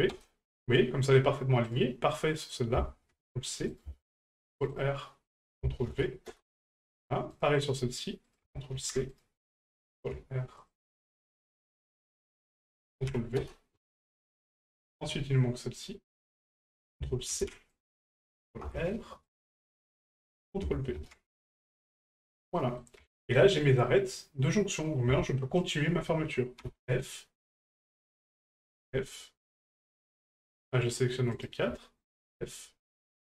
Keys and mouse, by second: 1.7 right click, 2.4-3.8 drag, 5.4 click, 7.3 right click, 8.4 ctrl+click, 11.6 click, 12.2-13.5 drag, 14.4 middle click, 14.8 shift+middle click, 15.8 right click, 16.8-17.9 drag, 20.3-21.9 drag, 22.5 middle click, 23.2 shift+middle click, 23.6 middle click, 24.8 right click, 25.6 shift+right click, 27.4 right click, 28.1 shift+right click, 29.5 right click, 30.1 shift+right click, 30.6 shift+right click, 31.3 shift+right click, 33.2 right click.